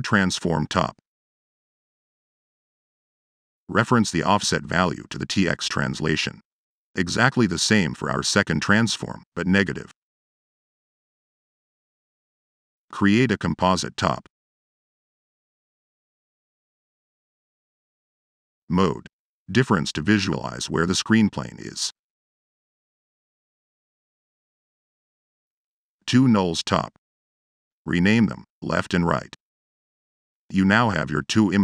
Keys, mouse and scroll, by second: 0.0 click, 0.3 click, 0.6 click, 1.2 click, 1.4 ctrl+c, 1.6 ctrl+v, 2.0 click, 2.7 click, 3.2 click, 3.9 click, 4.2-5.4 drag, 6.4-7.6 drag, 8.5 click, 9.1 click, 11.2 Delete, 11.7 m, 12.4 Tab, 12.7 m, 25.8 Tab, 27.0 ctrl+Tab, 30.4 Return.